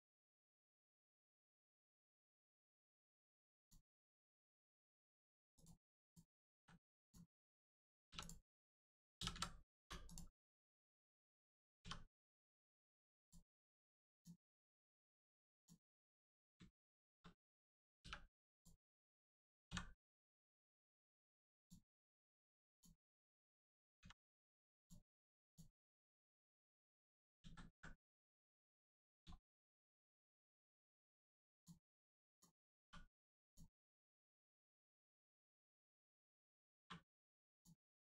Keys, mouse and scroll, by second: 0.8 click, 2.4 x, 3.5 click, 6.0 shift+click, 6.5 x, 6.9 click, 8.0 3, 8.1 click, 9.7 0, 10.0 click, 11.7 2, 12.4 click, 13.1 shift+click, 14.1 shift+click, 15.5 click, 16.1-16.5 scroll up 1, 16.7 shift+middle click, 17.9 middle click, 18.5 click, 19.6 x, 21.5 click, 23.9 x, 24.7 click, 26.1 scroll down 1, 26.3 middle click, 27.3 ctrl+z, 27.9 middle click, 28.3 scroll up 1, 28.9 middle click, 29.3 shift+middle click, 29.6 scroll up 1, 31.5 click, 32.3 click, 32.7 2, 33.4 click, 36.8 1, 37.5 click, 38.0 middle click.